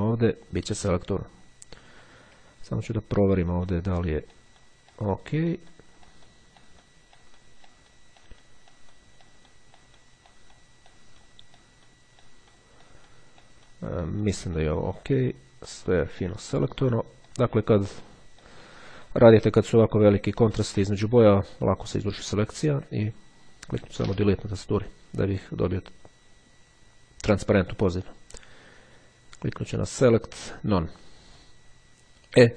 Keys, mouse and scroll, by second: 1.1-1.7 ctrl+scroll up 1, 1.9-2.4 ctrl+scroll up 1, 2.7-3.6 scroll up 1, 3.8 click, 5.1 click, 5.7 click, 6.2 click, 6.7 click, 7.3 click, 7.8 click, 8.3 click, 8.9 click, 9.3 click, 9.9 click, 11.0 click, 11.7 click, 12.3 click, 13.0 click, 13.5 click, 14.1 click, 14.7 click, 15.3 click, 15.8 click, 16.3 click, 16.9 click, 17.4 click, 17.9 click, 18.5 click, 19.2 click, 20.1-20.7 ctrl+scroll down 2, 21.3-21.8 ctrl+scroll down 3, 22.2-23.1 scroll down 2, 24.1 Delete, 29.7-30.7 drag.